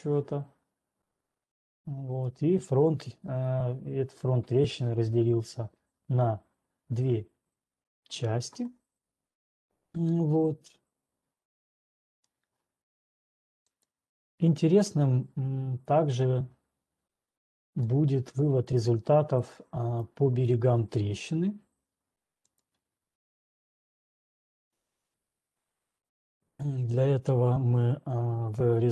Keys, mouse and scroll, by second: 1.0-1.4 scroll down 6, 1.4 scroll, 2.6 scroll, 3.6 scroll down 2, 3.8 scroll down 2, 12.6 scroll, 14.2 click, 14.6 scroll, 15.1 middle click, 16.2-16.6 scroll down 11, 17.6 scroll, 18.1 middle click, 18.1-19.1 scroll, 19.1 scroll, 20.1 right click, 20.1 scroll, 21.1-21.5 scroll, 22.6 click.